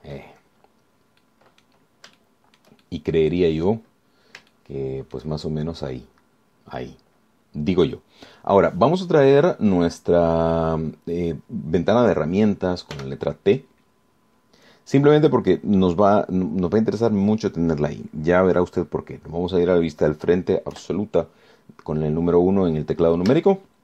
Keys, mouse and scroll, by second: 1.4-2.3 scroll down 2, 2.4 click, 3.4 shift+click, 4.1-5.1 shift+drag, 5.2-5.6 scroll up 1, 5.7 shift+click, 6.7 shift+scroll down 1, 14.1 t, 21.9 KP_1, 23.3-23.8 scroll down 2.